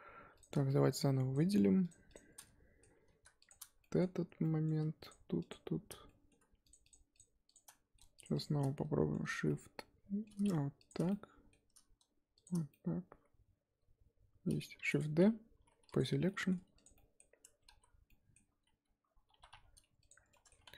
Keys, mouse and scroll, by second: 0.4 click, 1.3 shift+click, 1.9 shift+click, 2.4 middle click, 3.0-3.5 scroll down 4, 3.5 alt+shift+click, 3.8 middle click, 4.1-4.4 scroll up 3, 4.4 middle click, 5.1 alt+shift+Left, 5.5 alt+shift+Left, 6.0 middle click, 6.7 shift+Left, 6.9 shift+Left, 7.2 shift+Left, 7.5 shift+Left, 7.6 middle click, 8.2 shift+Left, 8.4 shift+Left, 8.6 middle click, 9.4 scroll down 2, 9.5-10.9 middle drag, 10.9 alt+shift+click, 11.1-12.4 middle drag, 12.4 alt+shift+click, 12.7-14.8 middle drag, 14.8 shift+d, 16.0 p, 16.2 middle click, 16.5 Tab, 16.8 click, 16.9 middle click, 17.4 Tab, 17.8 z, 18.1-19.3 middle drag, 19.3 1, 19.5 2, 20.1 alt+click, 20.3 middle click, 20.6 Tab.